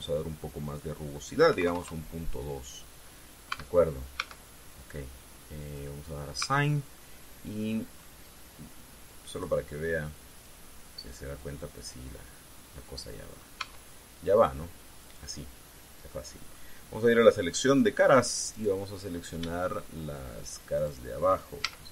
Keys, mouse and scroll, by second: 0.0 click, 2.2 KP_Decimal, 2.4 KP_2, 2.6 KP_Enter, 4.2 Tab, 4.9 Tab, 6.4 click, 7.1 Tab, 7.7-8.9 middle drag, 10.1 click, 11.1 click, 12.2-14.3 middle drag, 14.4 Tab, 16.8 middle click, 18.4 click, 19.2 right click, 19.8 scroll up 2, 21.5 shift+right click.